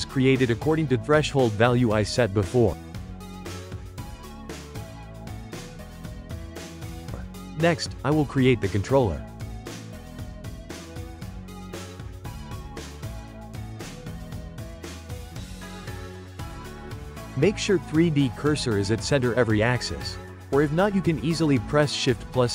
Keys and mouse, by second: 1.4-2.9 right drag, 4.2-5.6 shift+middle drag, 5.6-9.1 drag, 9.1-10.5 middle drag, 10.5-11.0 drag, 11.0 a, 12.1 g, 13.4-16.4 ctrl+middle drag, 16.4 click, 17.0-19.6 middle drag, 19.6 shift+c, 20.3-22.5 shift+middle drag.